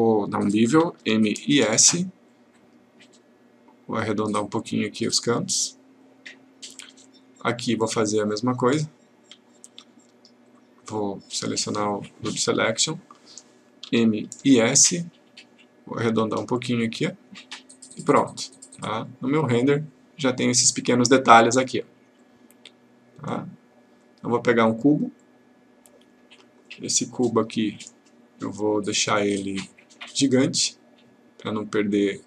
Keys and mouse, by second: 1.0 m, 2.6-5.7 click, 11.7 click, 12.6 click, 13.9 m, 19.1 click, 22.2-22.8 click.